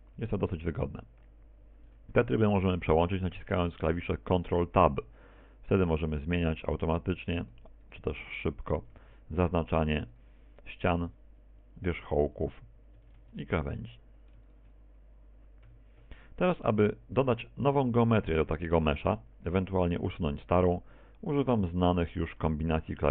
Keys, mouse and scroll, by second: 0.2 a, 3.4 ctrl+Tab, 6.9 right click, 7.4 right click, 7.9 right click, 8.4 right click, 9.0 ctrl+Tab, 10.2 right click, 11.1 ctrl+Tab, 12.4 shift+right click, 13.9 ctrl+Tab, 14.5 shift+right click, 15.2 a, 17.3 middle click, 18.2 middle click, 19.0 middle click, 22.4 middle click.